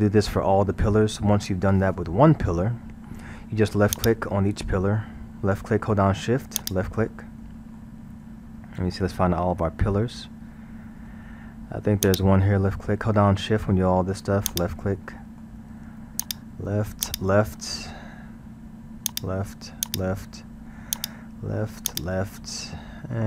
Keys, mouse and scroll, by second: 4.0 click, 6.6 shift+click, 7.1-8.4 shift+middle drag, 8.4 scroll, 9.0-12.0 middle drag, 12.1 shift+click, 12.7-14.5 shift+middle drag, 14.5 shift+click, 15.1-16.2 shift+middle drag, 16.2 shift+click, 17.1 shift+click, 17.6-19.1 shift+middle drag, 19.1 shift+drag, 19.9 shift+click, 21.0 shift+click, 21.9 shift+click, 22.5-23.2 shift+middle drag.